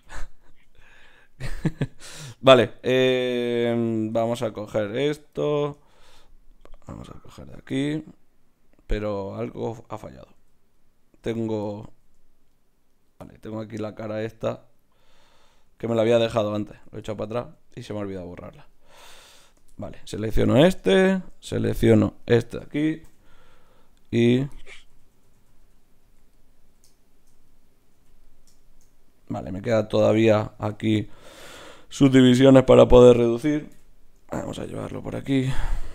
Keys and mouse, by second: 0.0 ctrl+z, 0.6 Tab, 4.1 ctrl+Tab, 5.0-9.0 right drag, 5.3-6.7 drag, 7.2-8.8 drag, 9.0 click, 10.4 z, 11.2 ctrl+Tab, 11.9 z, 12.5-14.7 drag, 15.7 x, 16.7 z, 18.0 ctrl+Tab, 18.7 click, 19.7-20.9 drag, 22.2-23.4 drag, 23.0 f, 24.2-26.0 typing, 27.9 f, 33.7 KP_Divide.